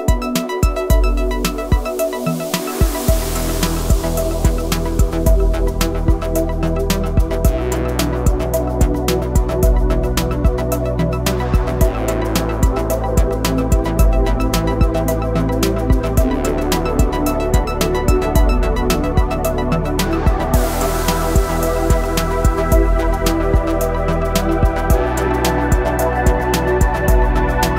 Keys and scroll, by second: 3.4 s, 8.2 g, 13.9 g, 19.4 e, 22.7 s.